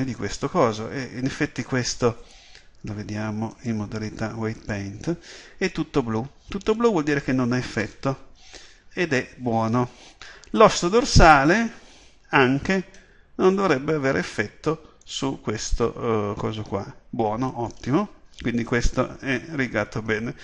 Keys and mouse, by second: 4.3-8.7 drag, 8.7 KP_7, 11.1-18.5 drag, 18.5 KP_7.